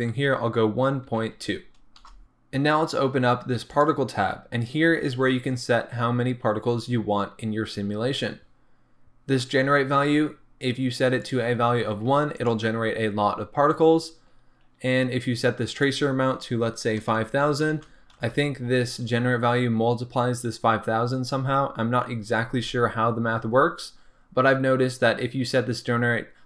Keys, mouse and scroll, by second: 2.1 Return, 3.7 click, 4.2-6.2 scroll down 1, 11.2-12.4 drag, 15.8-26.4 drag, 17.5 KP_0, 18.3 Return.